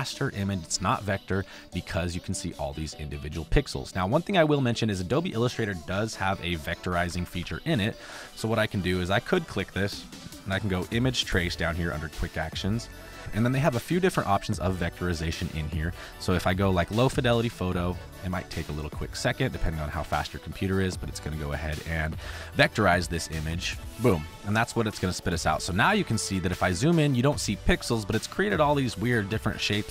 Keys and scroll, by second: 6.1 ctrl+c, 6.5 ctrl+b, 6.8 Right, 8.7 space.